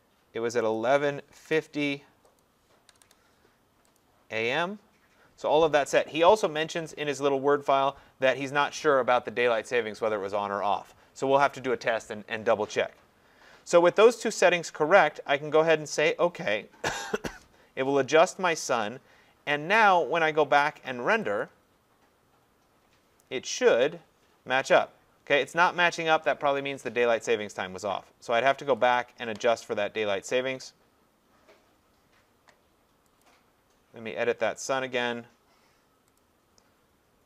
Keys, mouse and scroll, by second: 0.8 click, 1.1-1.9 typing, 2.4 click, 2.9 0, 3.1 0, 4.0 click, 17.0 click, 21.4 click, 28.9 click, 33.2 click, 36.2 click.